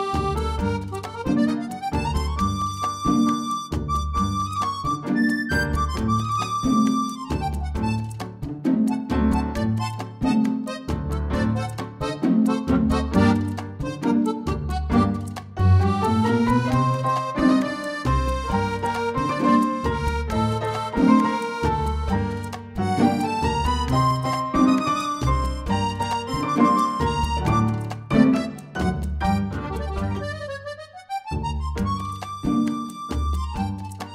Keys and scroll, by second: 14.5 ctrl+k, 14.9 BackSpace, 15.3 Up, 15.6 f, 15.7 Delete.